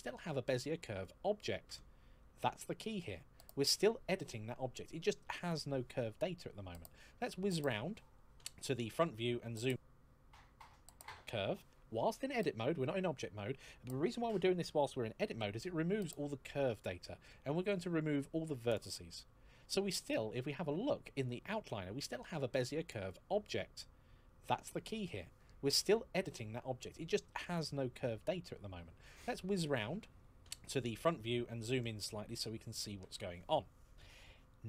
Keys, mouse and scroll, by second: 6.8 KP_1, 8.9-9.4 scroll up 1, 9.5 shift+middle click, 15.6 x, 18.4 click, 28.9 KP_1, 31.1-31.5 scroll up 1, 31.5 shift+middle click.